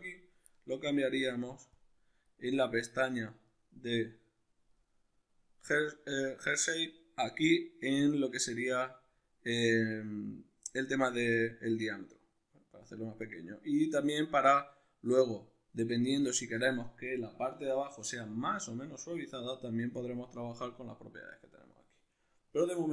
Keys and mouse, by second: 0.0-1.8 drag, 2.7-22.9 middle drag.